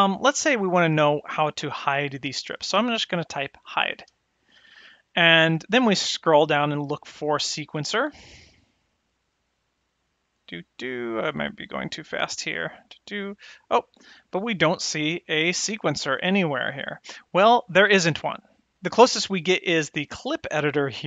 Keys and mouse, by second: 0.5-5.7 drag.